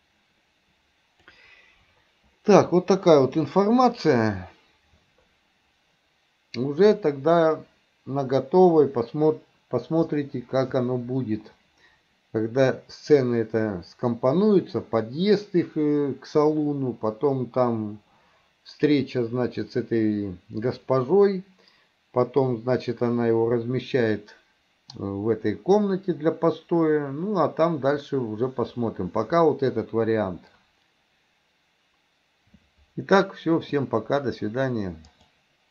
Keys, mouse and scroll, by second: 35.1-35.7 drag.